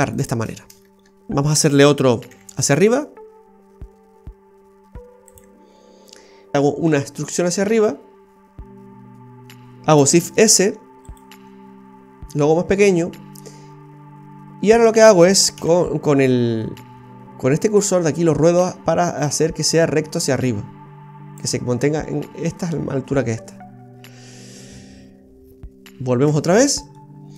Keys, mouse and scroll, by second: 0.1 alt+shift+right click, 0.5-1.3 scroll down 7, 2.3 e, 6.3 scroll up 1, 6.9 e, 10.1 shift+s, 11.3 s, 15.5 KP_3, 16.1 KP_1, 18.1 click, 26.3 Tab, 27.0 middle click.